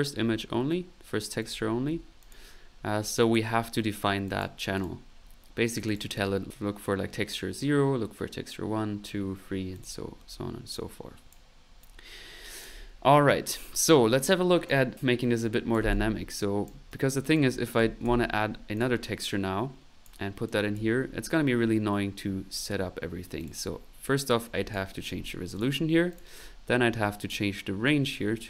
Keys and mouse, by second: 1.4 click, 3.2 click, 4.2 click, 5.2 middle click, 5.8 click, 9.7 click, 10.2 middle click, 10.7 click, 11.8-12.9 drag, 14.6 click, 15.5-16.9 drag, 16.9 right click, 17.7 ctrl+c, 17.8-20.0 typing, 18.7 ctrl+click, 19.3 ctrl+click, 20.5 click, 23.2 middle click, 23.4 click, 24.4 click, 26.1 click, 27.2 click, 27.8 click.